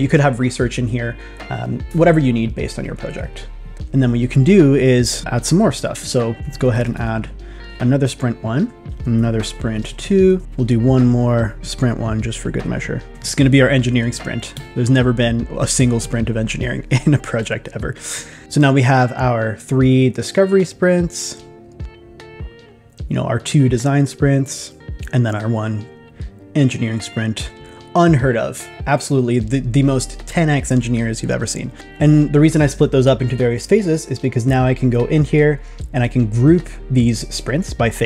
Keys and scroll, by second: 6.5 shift+s, 9.4 shift+s, 13.1 shift+s.